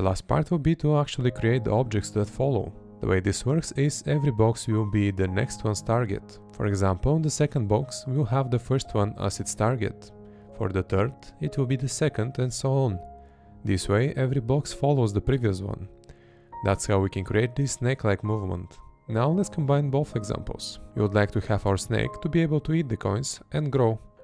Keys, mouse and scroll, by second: 0.4 Left, 1.5 Left, 2.3 Left, 6.8 Right, 7.9 Right, 15.0 Left, 17.8 Left, 19.8 Right, 20.9 Left, 21.9 Left, 23.6 Right, 24.0 Right.